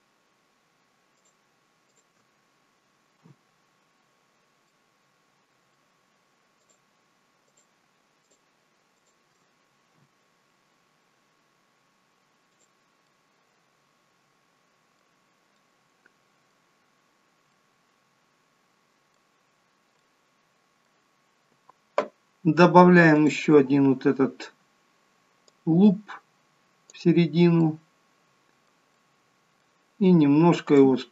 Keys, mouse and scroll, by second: 1.1 shift+click, 1.9 shift+click, 3.1 f, 4.2-4.6 scroll down 2, 4.6 middle click, 6.6 click, 7.4 shift+click, 8.1 click, 8.9 click, 9.9 f, 11.4 scroll down 1, 12.4 click, 12.9 middle click, 15.2 scroll down 2, 15.6 middle click, 17.0 scroll up 1, 17.4 middle click, 19.9 middle click, 23.1 click, 25.5 click, 27.6 middle click, 28.9 middle click, 30.7 click.